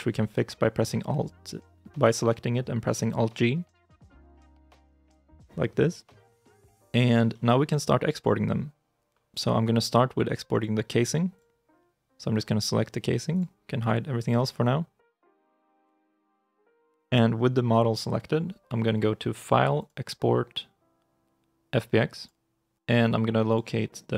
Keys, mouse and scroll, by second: 3.8 alt+g, 6.8 middle click, 7.1 shift+i, 7.4 shift+middle click, 13.6 double click, 14.9 KP_Decimal, 15.1 ., 15.6 scroll, 15.9 middle click, 16.9 ctrl+s.